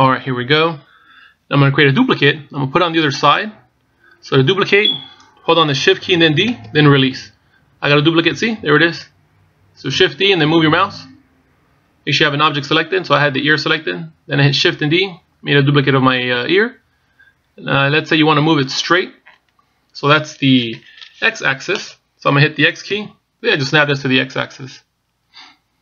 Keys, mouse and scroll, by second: 0.1-0.7 scroll up 2, 0.7-1.1 scroll down 1, 7.5 shift+d.